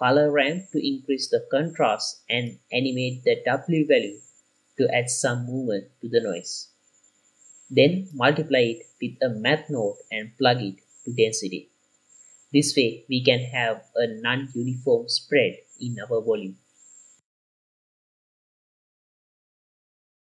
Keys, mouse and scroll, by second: 0.4 click, 1.4 click, 2.4 click, 3.8 middle click, 4.2 click, 4.4-4.9 drag, 5.4 click, 5.4 i, 6.7 i, 6.9 click, 8.7 click, 9.2-9.7 drag, 11.0 middle click, 11.3-12.1 drag, 12.6 middle click, 12.8 q, 13.3 click, 14.0 click, 14.7 click, 14.8 click, 15.0 middle click, 15.3 drag, 16.1 click, 16.1 middle click, 16.3-16.7 scroll up 2, 16.7 click, 17.5 click, 18.5 click, 19.1 BackSpace, 20.1 click.